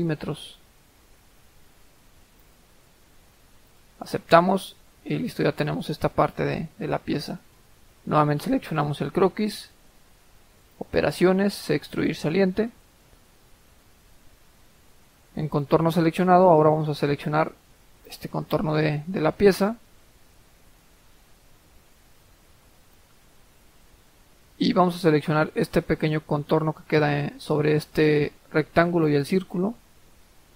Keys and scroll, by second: 1.4-2.3 typing.